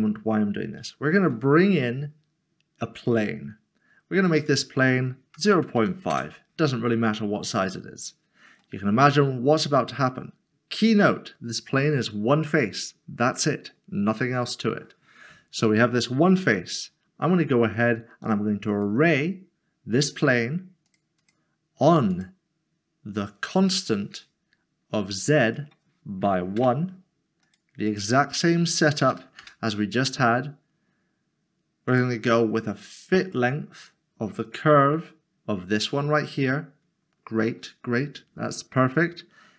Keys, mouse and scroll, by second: 0.8 click, 1.1 a, 3.1 click, 5.4-5.8 typing, 6.1 Return, 8.4-8.8 scroll up 1, 9.0 shift+middle click, 17.7 click, 20.9 click, 21.2 double click, 23.8 click, 26.3 1, 26.6 Return, 27.9 click, 29.1 d, 29.4 Return, 31.9 click.